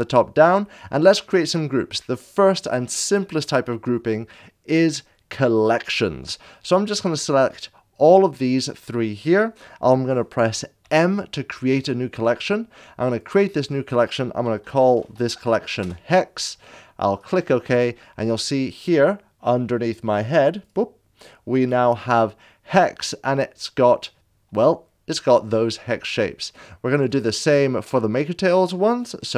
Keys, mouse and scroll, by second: 0.0-0.6 shift+middle drag, 0.0 scroll up 1, 7.2 click, 11.3 m, 13.1 click, 14.8 e, 15.1 shift+h, 15.1 x, 15.8 Return, 16.9 click, 20.0 click, 26.1 click.